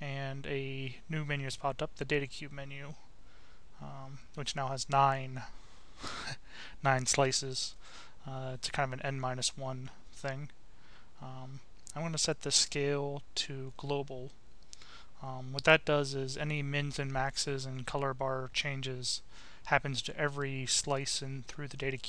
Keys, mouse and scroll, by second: 0.0 click, 2.0-3.8 drag, 4.4-5.6 drag, 11.3 click, 13.6 click, 14.8 click, 16.6 click, 17.2-20.7 right drag, 22.0 click.